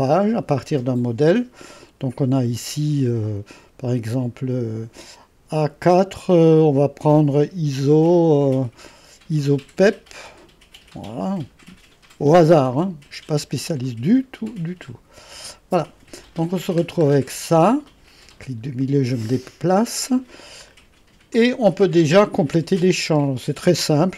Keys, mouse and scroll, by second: 0.0 click, 2.1-2.7 scroll up 1, 2.7-3.5 scroll down 1, 10.2-13.4 drag, 14.9-16.5 drag, 16.5-17.9 scroll up 3, 17.9 middle click, 17.9 scroll, 19.2 middle click, 19.3-20.7 scroll down 2, 20.7-21.4 scroll down 1, 21.4 middle click, 22.0-24.1 middle drag, 22.0-24.1 scroll.